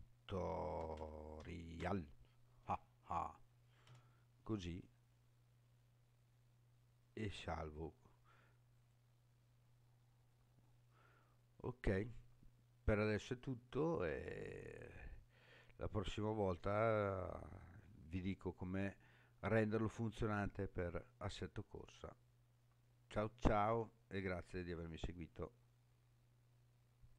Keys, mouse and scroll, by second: 14.5-15.2 scroll down 5, 15.7-16.9 scroll down 5, 16.9-17.3 scroll up 4, 18.0-18.8 scroll up 3, 18.8 scroll up 3, 20.1-20.8 scroll up 5, 20.8-21.5 scroll down 6.